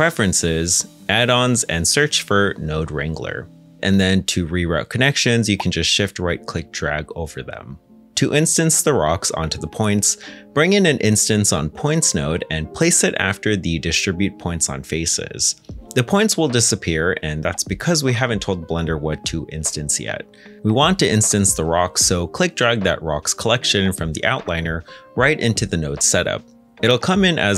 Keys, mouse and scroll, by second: 2.2 o, 2.4 e, 2.5 space, 4.5 ctrl+z, 4.8 shift+right click, 6.0 g, 6.7 Escape, 7.1 ctrl+z, 8.6 shift+middle click, 9.5 ctrl+z, 9.5 scroll up 1, 10.3-11.7 typing, 11.8 Return, 14.4 middle click, 16.8 g, 25.2-27.5 scroll up 1.